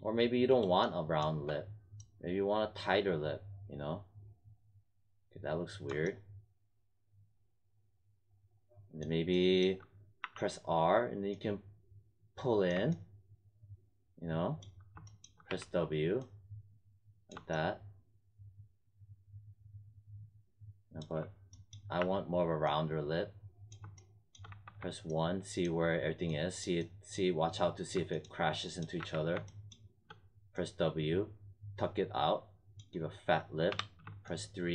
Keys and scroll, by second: 10.1 r, 15.4 w, 21.9 r, 24.4 1, 28.9 w, 33.6 3.